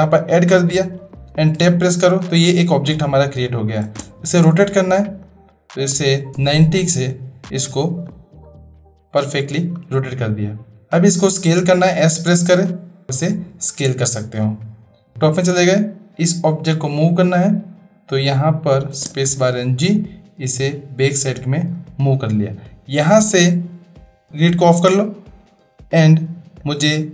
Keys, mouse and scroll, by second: 1.6 Tab, 3.8 space, 5.3-7.2 drag, 8.4-9.6 middle drag, 11.5 s, 18.9 space, 19.9-21.7 drag, 23.3-24.2 drag, 24.8-27.1 drag.